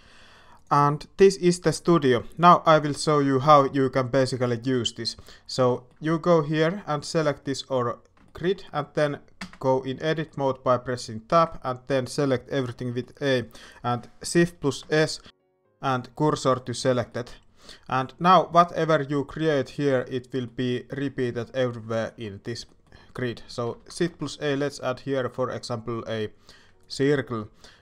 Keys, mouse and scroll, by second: 2.8-3.9 drag, 4.6-5.2 shift+middle drag, 5.7 shift+middle drag, 8.2 shift+middle click, 9.3 Tab, 10.2 shift+middle click, 11.3 a, 12.7 shift+middle click, 14.8 shift+s, 20.0 shift+middle click, 21.0 shift+middle click, 21.9 shift+middle click, 22.6 shift+middle click, 23.6 alt+a, 24.1 shift+a.